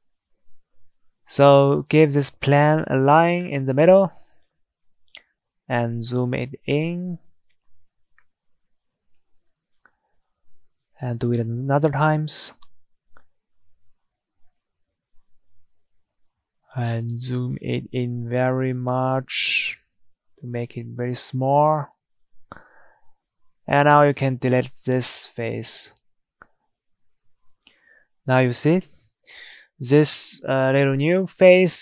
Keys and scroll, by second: 23.8 Delete.